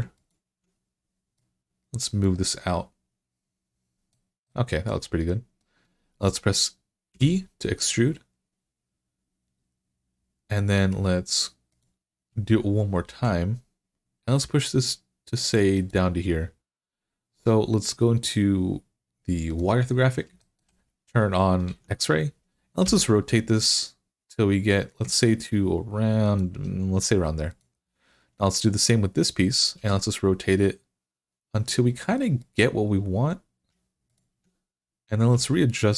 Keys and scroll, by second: 6.9 e, 12.9 e, 21.4 alt+z, 22.7 r, 29.6 r, 35.1 r.